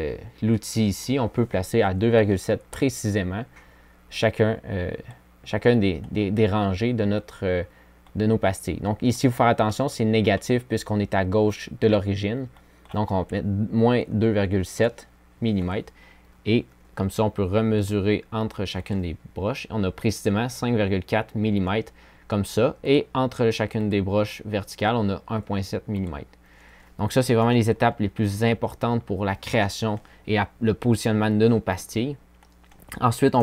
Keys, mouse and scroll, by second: 4.9 click, 22.1-22.9 drag, 24.0 click, 24.8 click.